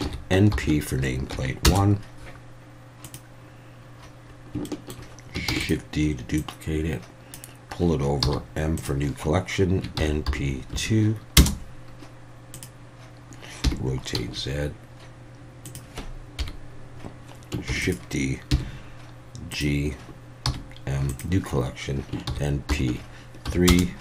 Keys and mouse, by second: 4.6-5.0 shift+middle drag, 5.5 shift+d, 5.6-7.3 drag, 8.2 m, 13.6 r, 14.1 z, 15.6 click, 16.4 KP_1, 17.7 shift+d, 17.8 click, 18.5 g, 20.5 m.